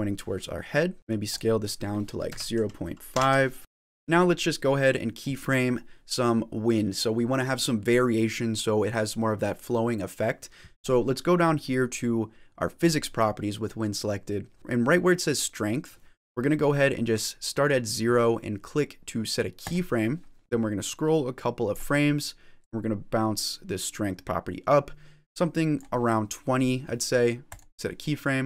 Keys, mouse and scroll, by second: 0.3 middle click, 1.2 click, 3.6 shift+middle click, 3.6 scroll down 4, 3.7-4.2 scroll down 2, 12.7 click, 19.7 click, 20.4 click, 22.4 click, 24.9 click, 27.4 click.